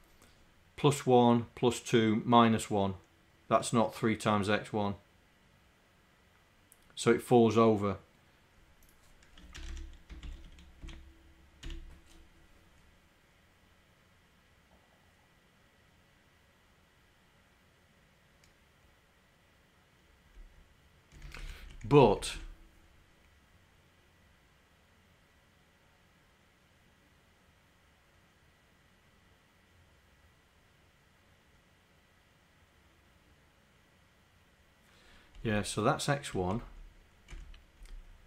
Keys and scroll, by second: 9.6 Home, 10.2 shift+End, 20.4 Right, 21.4 Up, 21.7 Right, 22.0 Down, 22.1 Right, 35.4 Right, 35.6 Right, 36.5 Right, 37.3 Right, 37.8 Left.